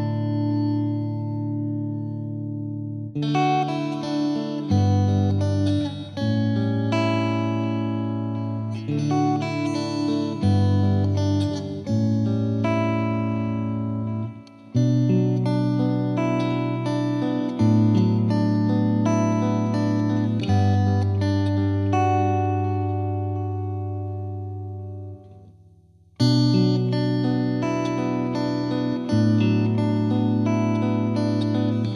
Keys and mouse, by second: 0.2 click, 0.9 click, 1.7 click, 2.2 right click, 2.5 click, 4.4 click, 6.6 click, 6.7 click, 7.2 click, 7.4 F2, 7.6 click, 8.2 click, 8.9 click, 10.2 click, 10.6 click, 11.1 F3, 11.4 F2, 11.4 F2, 11.8 click, 15.3 click, 16.9 click, 17.7 click, 18.6 click, 20.2 click, 20.8-22.7 drag, 23.0 click, 23.3 click, 28.5 click, 29.3 click, 30.4 click, 30.8 click, 30.9 click, 31.6 click.